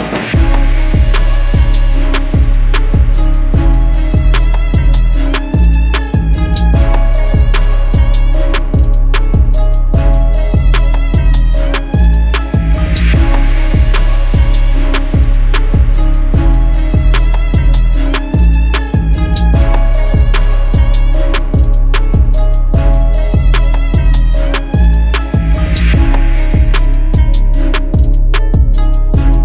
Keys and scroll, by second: 17.3 ctrl+z, 22.0 shift+Page_Down, 22.2 ctrl+Page_Up, 23.7 ctrl+g, 25.6 c.